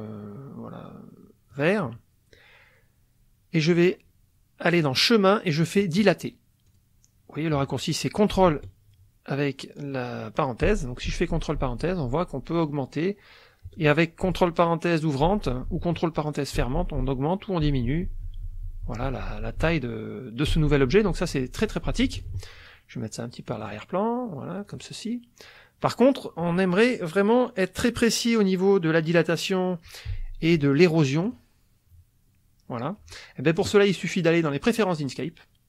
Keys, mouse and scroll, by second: 1.5 click, 4.8 click, 6.7 click, 10.7 ctrl+), 15.2 ctrl+(, 16.6 ctrl+), 17.6 ctrl+(, 20.5 ctrl+), 23.6 click, 24.7 click, 31.2 click, 33.5 click, 34.7 click.